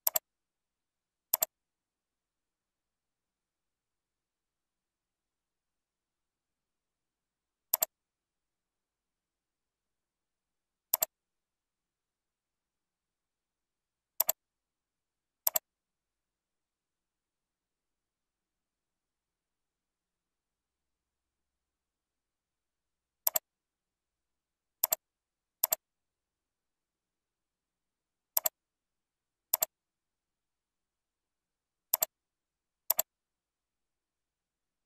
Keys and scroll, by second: 10.0 ctrl+b, 13.4 ctrl+b.